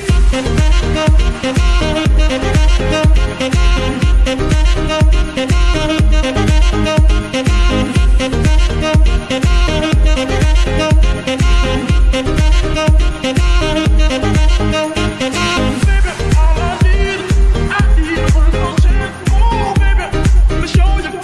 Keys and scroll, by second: 0.4 Escape, 1.3 r, 3.2 Escape, 6.3 g, 6.4 y, 8.6 Escape, 14.0 KP_2, 17.0 g, 17.1 y, 19.1 Escape.